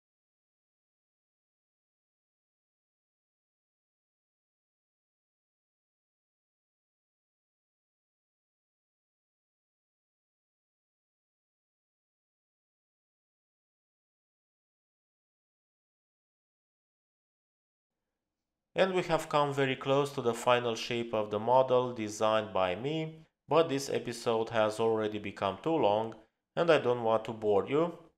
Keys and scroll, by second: 0.0-0.7 typing.